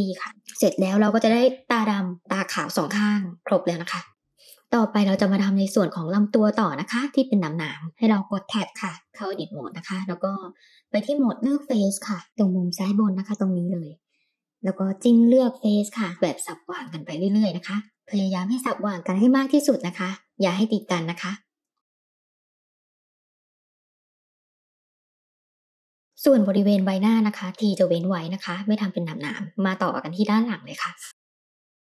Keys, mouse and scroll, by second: 1.2-3.2 middle drag, 3.5 click, 4.3 click, 4.6-5.6 middle drag, 8.7 Tab, 10.8-12.1 middle drag, 12.8 click, 15.2 click, 15.9 shift+click, 16.6 shift+click, 17.1 shift+click, 17.8 shift+click, 18.0 shift+click, 18.4 middle click, 19.6 shift+click, 20.3 shift+click, 20.8 shift+click, 21.1 middle click, 22.0 shift+click, 22.3 middle click, 22.6 shift+click, 22.8 shift+click, 23.0 middle click, 23.4 shift+click, 23.5 middle click, 23.8 middle click, 24.3 shift+click, 24.9 ctrl+z, 25.2 shift+click, 25.3 middle click, 25.4 shift+click, 25.5 middle click, 25.9-26.9 middle drag, 28.1-29.2 middle drag, 30.2 shift+click, 30.5 shift+click, 31.2 middle click, 31.7 ctrl+z.